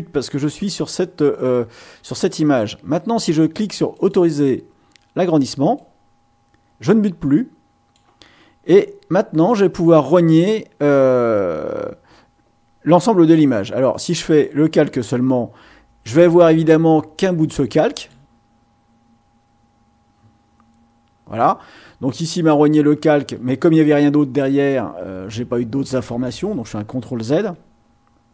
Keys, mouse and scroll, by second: 3.9 click, 5.8-8.1 drag, 8.7-10.0 middle drag, 14.3 click, 18.0 click, 27.2 ctrl+z.